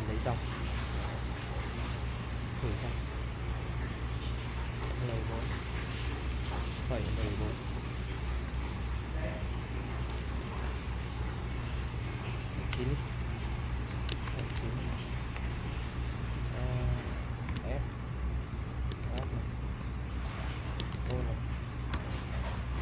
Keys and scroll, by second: 4.9-8.6 typing, 10.2-11.6 typing, 12.7 9, 13.9-15.6 typing, 17.3-21.4 typing, 21.9 Return.